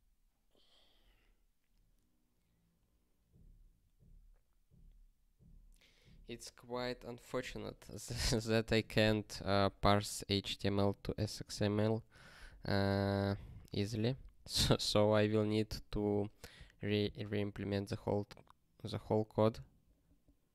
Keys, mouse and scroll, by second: 14.6 ctrl+p.